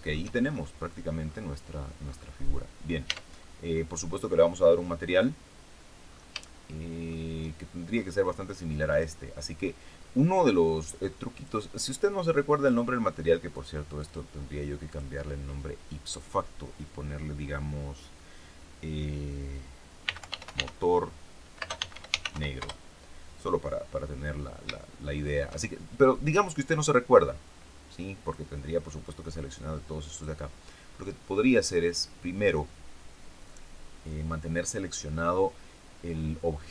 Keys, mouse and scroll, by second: 0.4-1.2 shift+scroll up 3, 1.2-1.8 scroll down 2, 2.0-2.3 scroll up 2, 2.3-3.0 scroll down 2, 3.0 Tab, 6.0-6.3 scroll down 2, 6.4 shift+middle click, 7.9 scroll up 1, 8.8 right click, 11.3 click, 13.4 click, 13.9 click, 14.8 click, 19.7-22.8 typing, 24.1-24.7 scroll down 3, 24.7 shift+middle click, 26.0 right click, 28.2 click, 30.1 click, 30.8-31.3 scroll up 2, 31.4-31.8 scroll down 2.